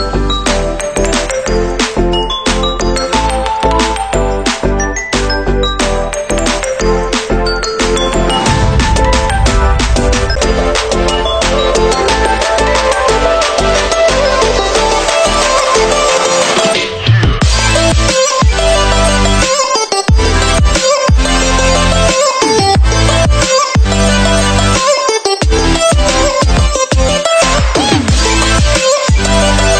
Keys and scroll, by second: 14.6 ctrl+z.